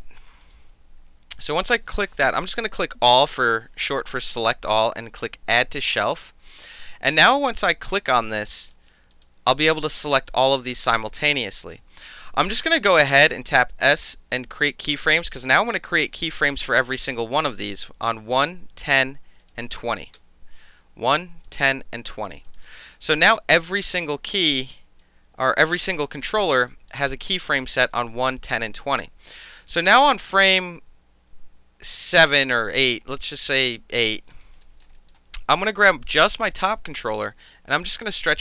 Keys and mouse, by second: 0.4 click, 2.3 shift+middle click, 2.4 shift+a, 2.8 l, 5.5 click, 7.8 click, 8.7 click, 9.1 click, 12.6 s, 13.7-15.3 drag, 15.7 s, 16.3 alt+drag, 16.9 alt+click, 18.0-19.4 middle drag, 19.4 click, 20.2 s, 21.5 click, 22.5 click, 25.0-25.7 drag, 25.7 middle click, 26.2 alt+right click, 26.7 alt+middle click, 29.3-32.9 drag, 34.2 alt+right click, 34.4 alt+middle drag, 34.6 alt+right drag, 34.8 alt+middle click, 35.1-35.8 alt+middle drag, 35.8 click, 35.9-36.9 middle drag, 36.9-37.8 drag, 37.8-38.4 middle drag.